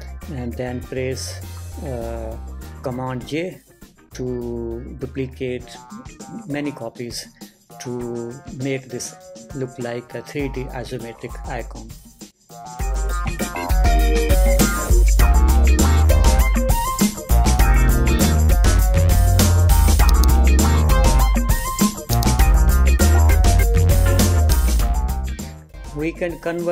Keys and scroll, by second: 0.3 Return.